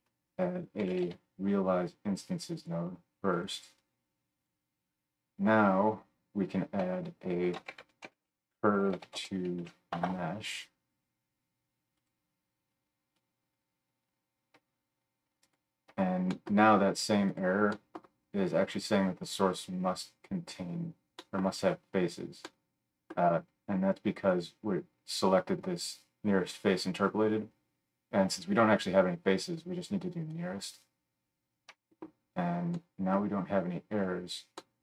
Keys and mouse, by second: 0.0 F3, 3.8-12.1 middle drag, 6.8 F3, 12.1-13.2 drag, 13.2-17.4 middle drag, 13.6-17.4 drag, 13.6-22.8 right drag, 22.8-24.3 drag, 31.3 click, 31.3 middle click, 31.3 right click.